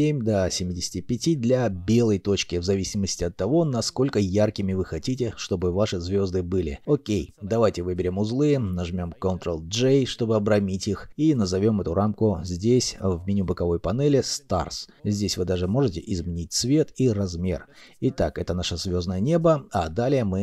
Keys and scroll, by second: 2.1-3.5 typing, 2.7 Return, 3.7 Return, 6.8 alt+F9, 8.1 ctrl+j, 8.8 n, 12.9-13.9 typing, 16.7 3, 16.9 Return, 16.9 2.